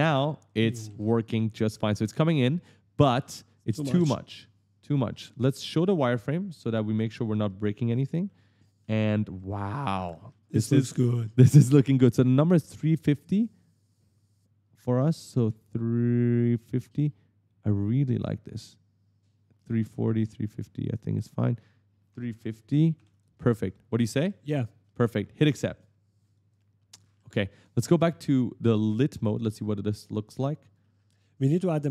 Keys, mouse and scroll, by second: 0.4 right click, 0.4 right click, 0.5 right click, 0.6 right click, 0.7 right click, 0.8 right click, 3.4 click, 5.9 click, 6.4 right click, 6.5 right click, 7.0 right click, 7.1 right click, 7.3 right click, 7.4 right click, 7.9 right click, 8.0 right click, 8.4-11.5 typing, 8.5 right click, 8.8 right click, 9.2 right click, 9.8 right click, 10.9 right click, 11.2 right click, 12.6 click, 17.0 click, 18.2 click, 20.9 click, 22.9 click, 23.3 right click, 23.4-25.2 typing, 24.3 right click, 24.6 right click, 24.8 right click, 26.1 click, 26.8 right click, 26.9 s, 27.0 right click, 27.1 w, 27.2 right click, 29.1 click, 30.1 click, 30.3-31.9 typing, 30.5 right click, 30.8 right click, 31.3 right click, 31.5 right click.